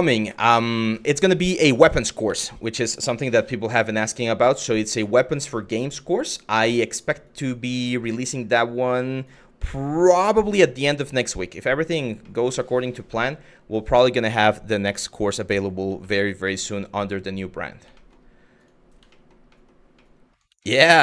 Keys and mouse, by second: 0.0 shift+middle click, 0.6-0.9 middle drag, 1.5 shift+middle drag, 1.9 Tab, 2.9 Tab, 9.2 middle click, 9.7 Tab, 10.9 middle drag, 11.3 middle drag, 11.9 middle drag, 12.8 middle drag, 14.6-14.9 middle drag, 15.8 shift+middle drag, 17.6 shift+middle drag, 18.2 click, 18.8 shift+middle drag, 19.1 shift+middle drag, 19.7 shift+middle drag, 20.9 middle drag.